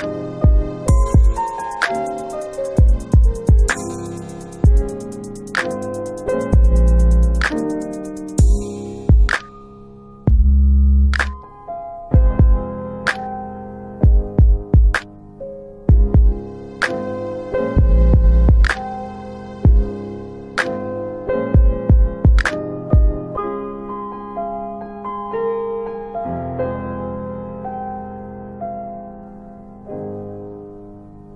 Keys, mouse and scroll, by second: 4.1 click, 4.5 click, 7.7 click, 10.3-11.9 scroll up 1, 13.6 click, 19.5 click, 25.2 click, 28.4 click, 29.9 click, 30.2 click.